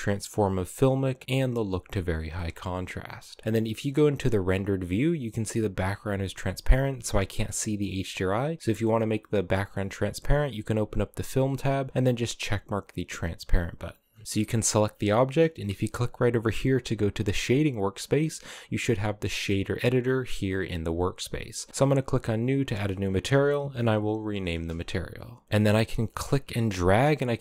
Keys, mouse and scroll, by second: 1.8-2.1 scroll down 1, 2.1 click, 2.4 z, 3.4-7.1 shift+middle drag, 7.7 scroll down 3, 9.3-9.6 drag, 9.6-11.3 scroll down 6, 11.3 click, 11.7 click, 13.1 click, 13.7-14.2 scroll up 12, 14.2-15.6 drag, 17.6-18.7 scroll down 6, 19.8-25.2 drag, 25.4-27.4 drag.